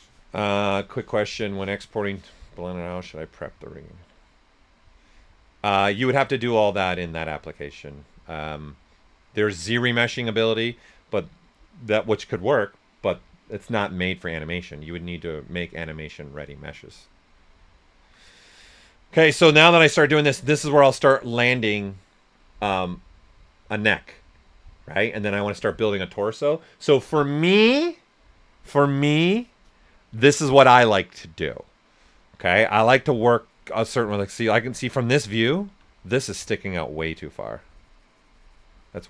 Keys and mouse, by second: 17.7 alt+right click, 19.6 right click, 37.0-39.0 shift+drag.